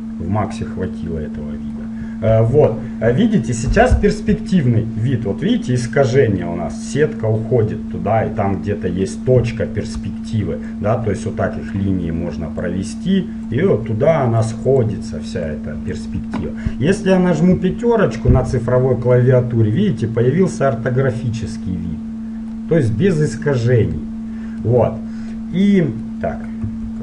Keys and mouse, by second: 0.7-5.9 middle drag, 10.1-10.8 d, 10.8-13.7 drag, 11.9-16.3 d, 14.3 click, 16.6 click, 17.7 KP_5, 18.7-21.1 middle drag, 23.0-24.6 middle drag, 26.8 n.